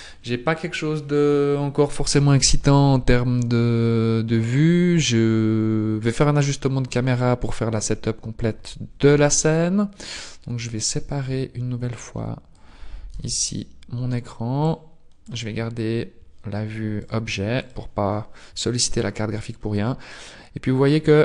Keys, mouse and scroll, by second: 9.1 n, 9.9 click, 13.1 n, 13.7 n, 14.5 click, 14.7 click, 15.5-16.3 scroll down 1, 17.0 click, 17.7 click, 17.7 scroll down 1, 20.3 scroll down 4, 21.1-21.2 scroll up 2.